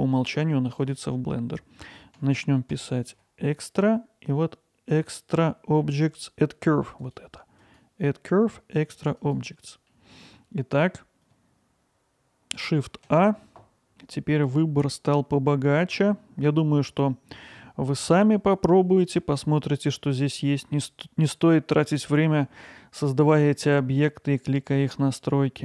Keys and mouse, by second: 9.9-10.4 middle drag, 13.1 shift+a.